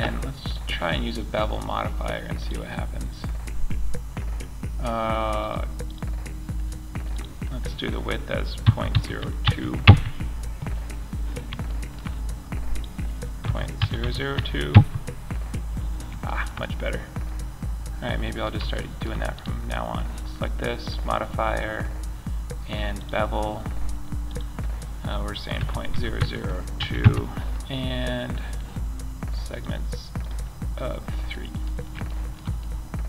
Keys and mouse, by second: 4.8-7.5 drag, 11.1 middle click, 13.3 KP_0, 25.5 KP_0, 30.7-31.5 middle drag.